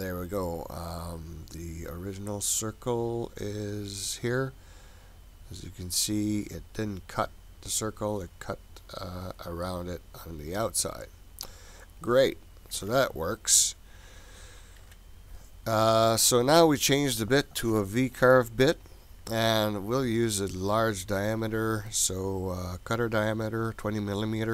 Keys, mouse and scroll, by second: 0.1-1.5 scroll up 2, 4.2 click, 11.8 click, 12.7 Delete, 13.9 click, 14.8 Delete, 16.2 click, 18.8-21.0 scroll down 13, 21.0-22.8 scroll down 2.